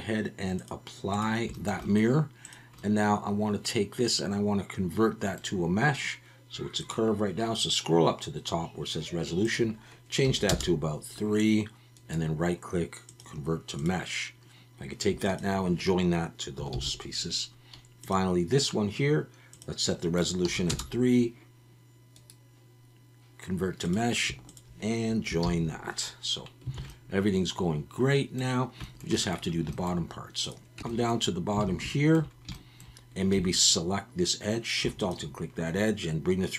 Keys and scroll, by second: 16.7 ctrl+j, 25.4 ctrl+j, 26.8 alt+a, 30.8 Tab, 31.6 alt+a, 33.3 2.